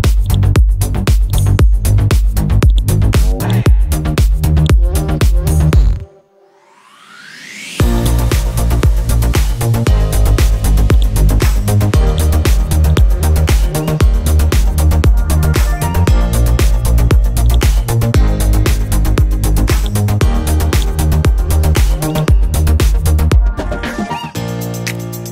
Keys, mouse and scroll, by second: 0.3 click, 1.4-2.4 drag, 5.5 scroll up 1, 6.2 scroll down 1, 6.9 scroll up 1, 8.0-10.2 drag, 10.2-10.7 scroll up 1, 10.9 shift+click, 11.9 shift+click, 13.3 scroll up 1, 13.6 right click, 15.5 scroll up 1, 16.8 Left, 17.5 click, 17.8 scroll up 1, 17.8 scroll down 1, 19.2 scroll up 1, 19.8 click, 22.4-23.0 scroll down 1, 23.0-23.8 scroll up 1.